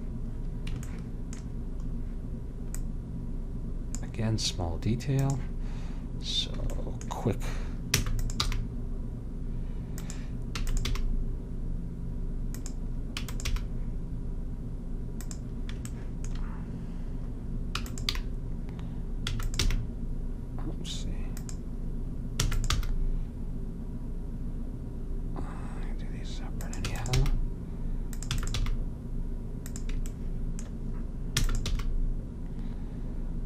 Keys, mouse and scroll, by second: 1.2 middle click, 2.9-4.6 drag, 5.3-6.3 drag, 8.1 e, 8.6 g, 10.7 e, 11.0 g, 13.4 e, 13.6 g, 18.0 click, 18.3 g, 19.8 g, 22.6 e, 22.9 g, 27.0 e, 27.3 g, 28.4 e, 28.7 g, 30.2 middle click, 31.5 e, 32.0 g.